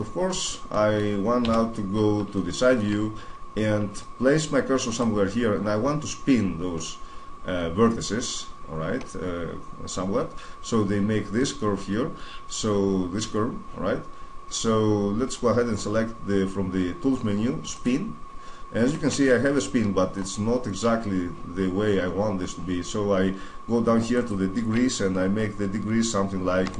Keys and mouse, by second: 0.1-1.2 middle drag, 1.2 KP_3, 4.7-6.6 drag, 17.5-19.3 drag, 19.3-21.6 middle drag, 23.9-25.9 drag.